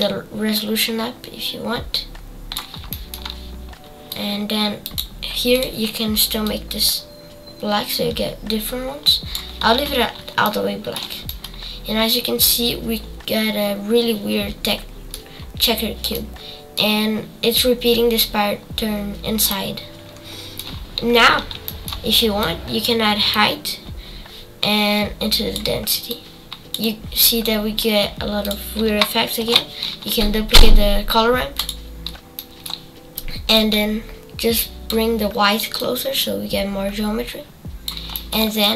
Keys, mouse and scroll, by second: 6.5 click, 11.2-14.3 middle drag, 15.3-16.1 scroll up 5, 16.1 middle click, 16.9-18.6 scroll up 1, 18.6-19.5 scroll down 7, 19.5-22.4 middle drag, 22.4-25.7 drag, 26.1-28.5 drag, 29.4 shift+d, 33.7-38.7 drag.